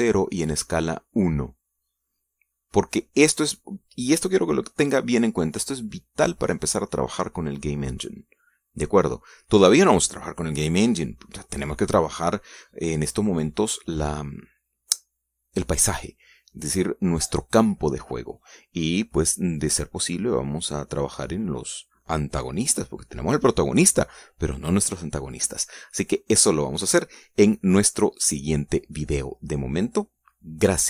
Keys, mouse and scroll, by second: 3.7-4.3 scroll up 2, 4.7 scroll down 2, 6.4 scroll down 2, 6.7-7.5 scroll up 4, 7.6-7.9 scroll down 2, 30.1-30.5 scroll down 2.